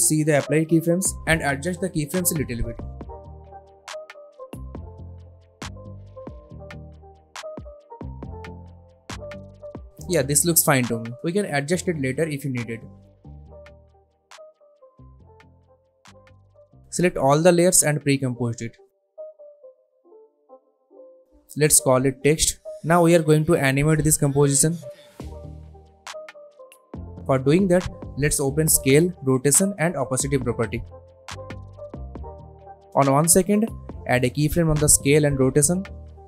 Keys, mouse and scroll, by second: 0.4-1.0 drag, 5.3 space, 6.3 space, 6.4-7.9 drag, 8.6-9.3 shift+click, 9.7 space, 11.4-12.5 drag, 13.3 space, 14.4 click, 15.3 click, 16.3 u, 16.7 click, 17.8 shift+click, 18.0 right click, 19.4 click, 21.1-22.2 typing, 22.4 Return, 25.2 click, 28.5 s, 29.9 shift+r, 31.4 shift+t, 33.6-34.2 drag.